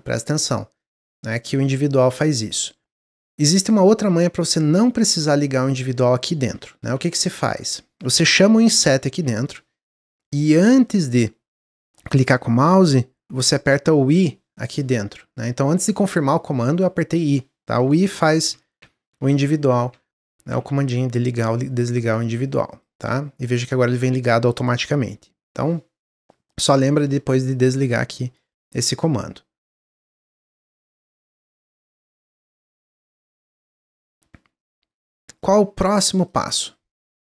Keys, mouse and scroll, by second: 0.2 click, 0.8 click, 1.4 click, 1.8 click, 2.2 click, 6.6 middle click, 7.0 ctrl+z, 7.4-9.0 middle drag, 9.0 i, 30.1-33.1 middle drag, 33.8 click, 34.5 click, 35.3 shift+click, 35.7 shift+click, 36.2 shift+click, 36.6 shift+click, 37.1 shift+click.